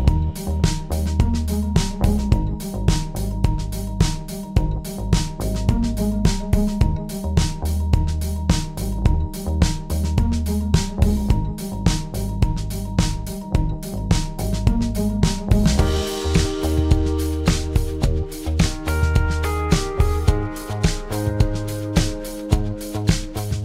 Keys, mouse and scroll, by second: 0.0-2.2 drag, 15.1 click, 17.7 click, 19.8 click, 23.5 click.